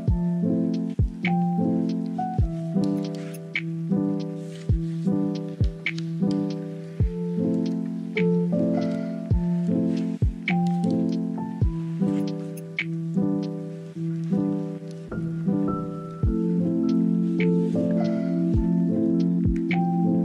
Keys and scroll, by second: 0.6 ctrl+z, 2.2 ctrl+z, 4.0 ctrl+z, 4.2 ctrl+z, 5.3 ctrl+z, 7.2 space, 9.0 z, 9.4 space, 9.9 ctrl+z, 12.4 space, 12.8 ctrl+z, 14.0 ctrl+z, 14.5 scroll, 15.2 scroll, 16.2 space, 18.0 space, 18.3 space.